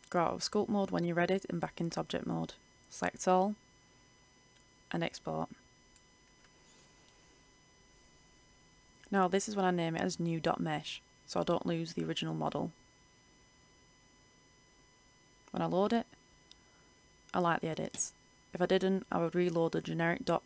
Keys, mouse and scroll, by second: 1.8 a, 2.2 a, 3.2 click, 4.9 right click, 5.4-5.9 scroll down 1, 5.9 Tab, 5.9 click, 5.9 a, 6.5 click, 9.1 Return, 10.2-13.8 drag, 15.7-16.2 scroll up 1, 16.2-18.8 drag, 19.0-19.4 scroll down 1, 19.4-19.7 scroll up 1.